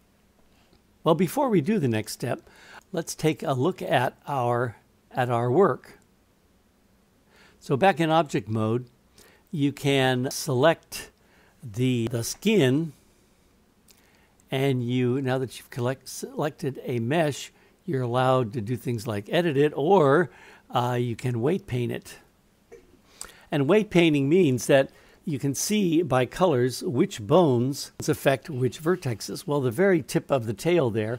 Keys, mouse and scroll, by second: 2.8-4.0 drag, 8.2 click, 10.3 click, 15.4-21.4 drag, 24.0-25.3 middle drag.